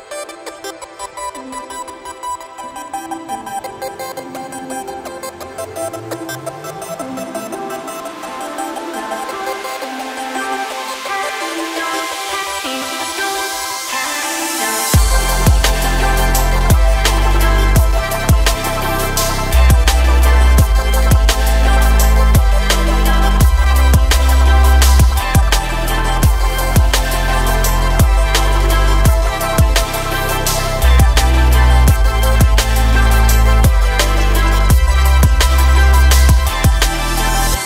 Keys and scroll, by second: 0.2 Tab, 3.7 Delete, 6.3 KP_1, 24.2 Tab.